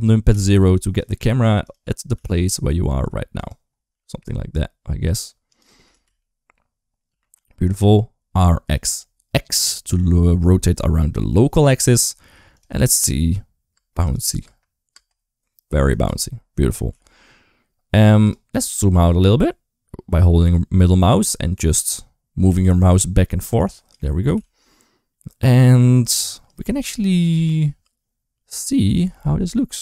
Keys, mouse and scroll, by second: 0.1 ctrl+alt+KP_0, 2.0 g, 3.7 g, 5.7 r, 12.6-15.7 typing, 18.3 g, 24.1 r.